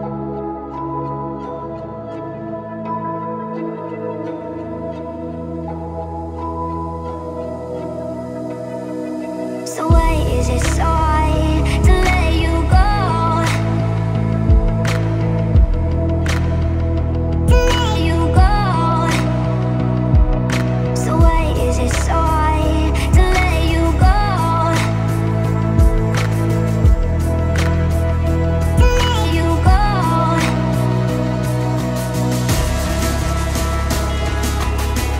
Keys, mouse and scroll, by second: 1.0 Up, 6.7 click, 8.6 Right, 10.6 click, 11.6 m, 12.2 click, 14.2 Right, 16.4 click, 16.6 space, 16.8 scroll down 1, 17.2-19.2 shift+middle drag, 19.2 m, 19.6 ctrl+click, 20.6 Up, 21.6 click, 22.2 q, 22.3 click, 23.3-24.4 typing, 25.4 scroll up 1, 25.6 m, 26.2 click, 27.2 Right, 29.0 click, 29.5 space, 29.9 m, 30.0 click, 31.1 Up, 32.9 click, 33.1 space, 33.6-34.0 scroll up 1, 34.2 shift+middle click, 34.7 scroll up 1.